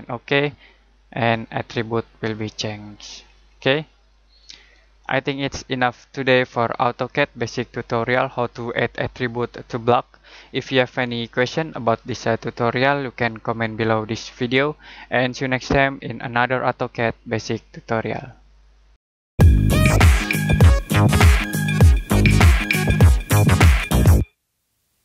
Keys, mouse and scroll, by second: 3.2-3.8 scroll down 1, 3.8 middle click, 4.1-4.6 scroll up 1, 4.6 middle click.